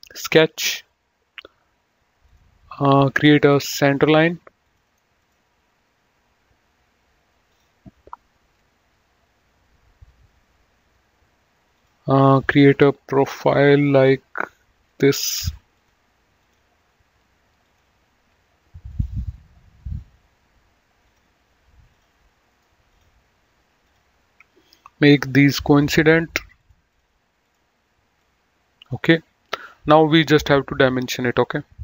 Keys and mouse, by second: 2.3 click, 4.7 click, 4.9 right click, 5.2 click, 7.5 click, 11.6 click, 13.9 click, 17.6 click, 18.9 click, 21.0 click, 22.5 right click, 22.8 click, 24.9 click, 26.5 click.